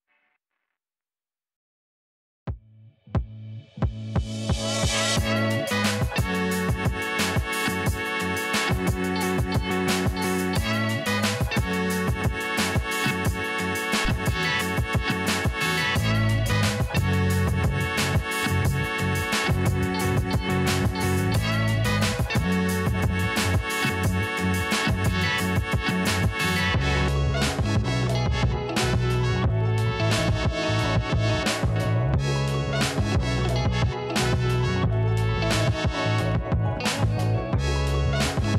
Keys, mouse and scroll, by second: 0.9 middle click, 1.1 middle click, 1.4 middle click, 2.0 scroll down 1, 2.1 middle click, 3.3-5.0 shift+drag, 5.9 shift+click, 8.6 shift+click, 14.3 shift+click, 18.6 shift+click, 21.1 shift+click, 22.8 shift+click, 24.5 shift+click, 25.2 shift+click, 26.2 shift+click, 28.4 shift+click, 30.0 9, 30.1 8, 31.0 KP_3, 31.2 KP_0, 32.0 Return, 33.4 click, 36.6 click, 37.9 click.